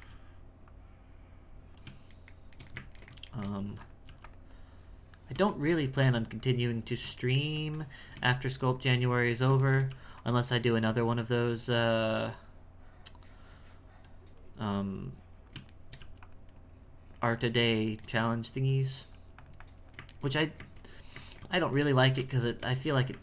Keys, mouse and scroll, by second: 0.7-2.2 drag, 2.2-3.6 shift+middle drag, 3.6 f, 4.0 f, 4.5-5.6 drag, 5.6 shift+middle click, 6.4 click, 7.2 shift+middle click, 7.7 click, 8.4 shift+middle click, 8.8 click, 9.7 shift+middle click, 10.4-14.4 drag, 14.8 click, 15.8 shift+middle click, 16.6-17.8 drag, 17.8 shift+middle click, 18.2-20.2 drag, 20.2-23.2 ctrl+shift+middle drag.